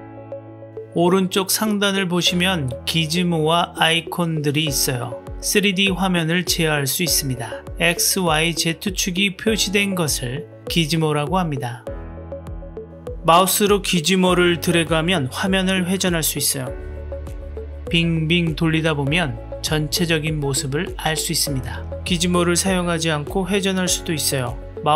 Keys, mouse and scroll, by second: 14.2-22.2 drag, 24.1-24.9 middle drag.